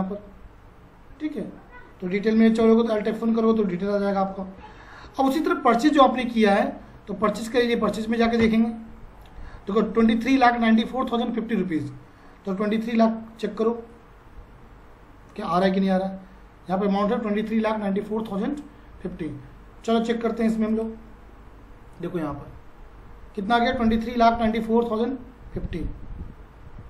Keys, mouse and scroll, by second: 2.4 click, 2.7 alt+F1, 7.3 Up, 8.4 Return, 15.5 F4, 19.0 F4, 20.7 click.